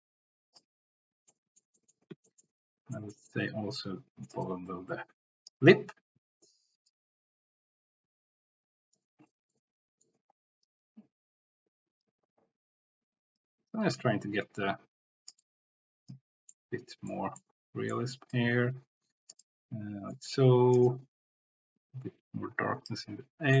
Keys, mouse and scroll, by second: 1.3 middle click, 1.8 middle click, 2.2 shift+middle click, 2.9 middle click, 3.7 click, 4.4-9.0 drag, 9.5 middle click, 10.8-12.1 drag, 12.3-13.5 drag, 13.8-15.3 drag, 16.5 middle click, 17.4 middle click, 18.2-19.3 drag, 20.8-22.9 drag, 23.5 middle click.